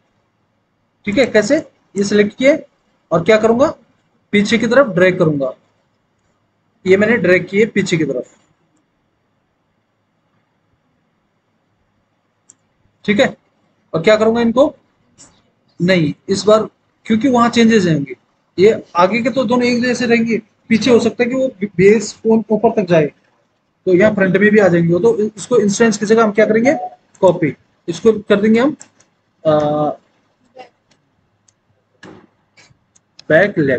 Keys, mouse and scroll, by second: 4.1 alt+w, 5.0 alt+w, 30.5-33.7 typing.